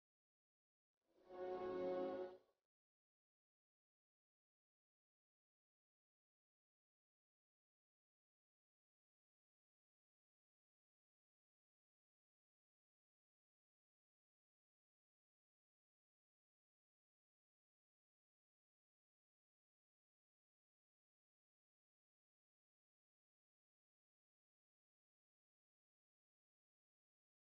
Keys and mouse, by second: 0.8-4.0 drag, 4.6 click, 5.8 KP_1.